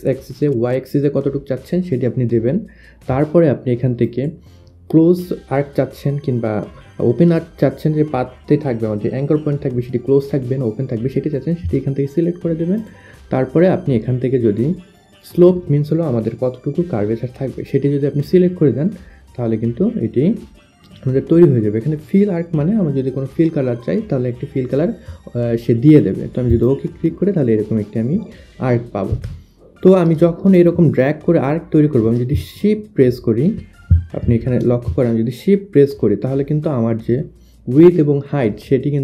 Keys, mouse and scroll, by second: 3.7 click, 12.4 click, 26.1 click, 28.7 Delete, 29.2 click, 29.8 click, 30.1 click, 31.9 shift+click, 32.8 shift+click, 33.1 click, 34.9 shift+click.